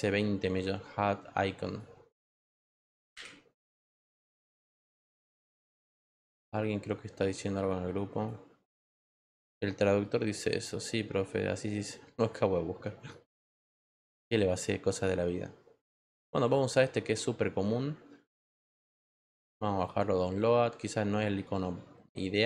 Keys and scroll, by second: 2.2-5.1 typing.